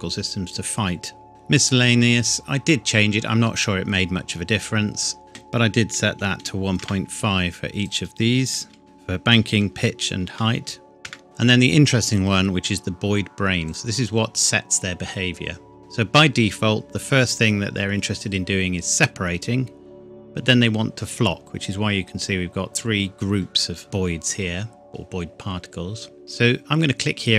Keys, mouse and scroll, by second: 3.9 click, 5.9 KP_1, 6.2 KP_Decimal, 6.4 KP_5, 6.8 KP_Enter, 7.7 click, 8.6-10.2 typing, 8.8 click, 11.0 KP_Enter, 11.2-11.7 scroll down 1, 13.7 click, 23.8 scroll down 1.